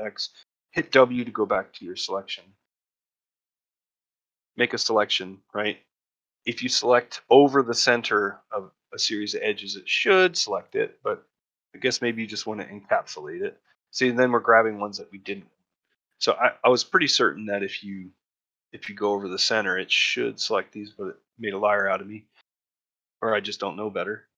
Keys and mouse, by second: 3.0 middle click, 3.8 click, 6.0-8.2 drag, 10.5-12.9 drag, 15.9 click, 16.2-17.3 drag, 17.7-19.2 drag, 21.8 middle click, 23.5 middle click, 24.1 middle click.